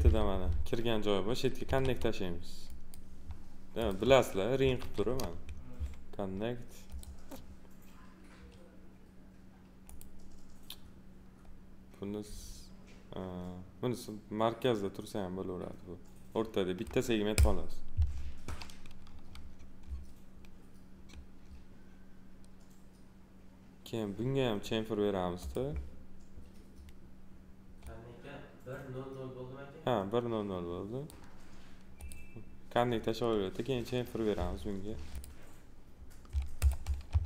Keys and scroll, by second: 1.6 2, 4.7 alt+r, 37.0 2.